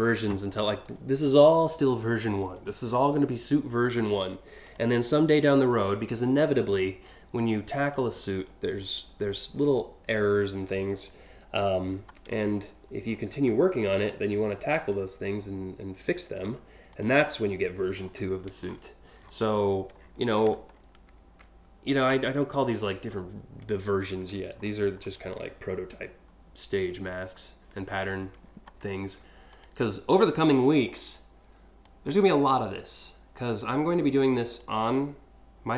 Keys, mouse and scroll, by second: 4.3 click, 7.8 scroll up 2, 9.9-10.6 scroll down 2, 12.7-13.2 alt+scroll up 2, 14.5-16.0 drag, 16.5 click, 17.6 scroll down 3, 18.3 alt+scroll down 1, 18.8 alt+scroll down 1, 19.6 scroll down 1, 20.3 scroll up 1, 21.8 ctrl+scroll up 1, 22.5 ctrl+scroll up 1, 23.6 ctrl+scroll up 1, 24.2 scroll down 1, 24.6 scroll up 1, 25.4 scroll up 1, 25.7 scroll down 2, 28.0-28.6 scroll up 3, 29.2 click, 30.3-31.5 drag, 32.1 click, 33.2 click.